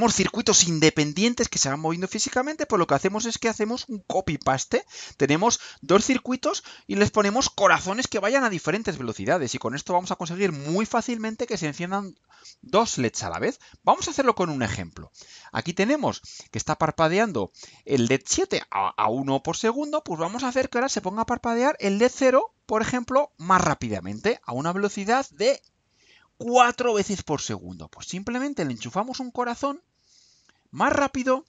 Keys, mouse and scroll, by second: 12.7 click, 13.8 click, 15.2-16.3 right drag, 21.6 click, 23.1 Delete, 25.6 click, 27.2 click, 28.5-29.7 drag, 30.0-30.8 drag.